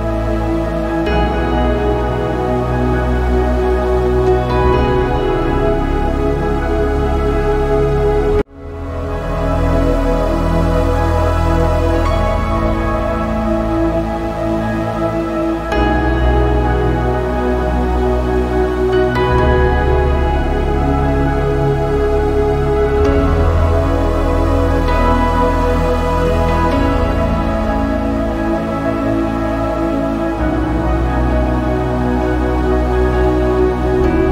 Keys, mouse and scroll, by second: 0.4 middle click, 0.5 right click, 0.8 click, 1.0 scroll down 1, 1.1 middle click, 1.3 KP_1, 1.6 shift+scroll up 1, 1.8-2.2 ctrl+scroll down 1, 2.2 click, 4.0 middle drag, 4.3 scroll up 2, 4.4 shift+middle click, 5.4-6.1 drag, 6.7 click, 7.4 z, 8.0 n, 8.3 click, 8.9 click, 17.5 n, 18.1-18.7 drag, 18.7 ctrl+z, 19.0 scroll down 1, 19.1 middle drag, 19.3-19.9 drag, 19.9 shift+middle drag, 20.1 scroll up 1, 20.3 z, 20.6 middle click, 21.0 n, 22.0 click, 22.9 middle click, 23.5 click, 24.2-25.3 middle drag, 33.8 middle click, 34.2 a.